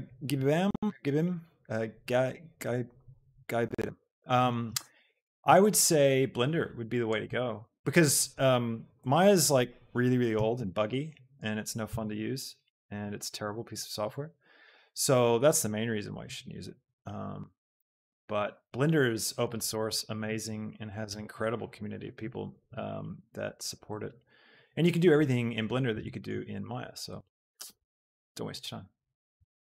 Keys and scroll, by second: 10.3 g, 10.7 y, 11.8 Escape, 14.7 shift+KP_7, 20.2 shift+z, 21.0 Escape, 22.8 KP_7, 29.4 shift+Tab.